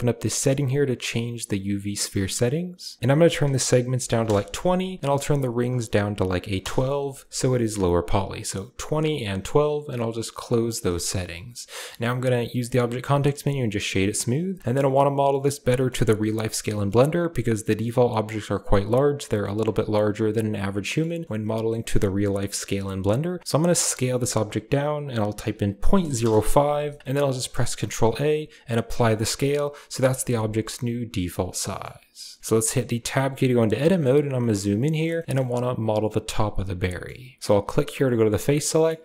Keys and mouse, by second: 0.1 drag, 0.9 click, 3.0-4.1 drag, 5.3-6.5 drag, 7.2 click, 10.3 drag, 10.9 shift+middle click, 11.7 middle click, 12.4 w, 14.6 shift+middle click, 15.6 shift+middle click, 16.4 click, 16.6 shift+click, 20.7 middle click, 21.1 shift+middle click, 21.5 middle click, 22.1 click, 23.7 s, 27.0 shift+click, 27.4 ctrl+a, 29.8 KP_Decimal, 30.6-31.2 drag, 31.5 shift+drag, 32.9 Tab, 33.5 click, 34.2 ctrl+click, 35.0 shift+click, 36.7 shift+click, 38.2 click, 38.6 middle click.